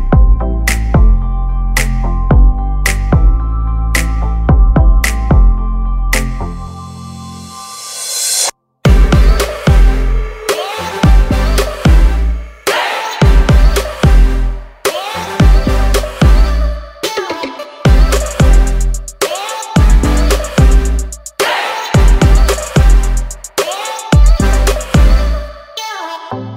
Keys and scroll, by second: 6.7 ctrl+c, 7.3 ctrl+f.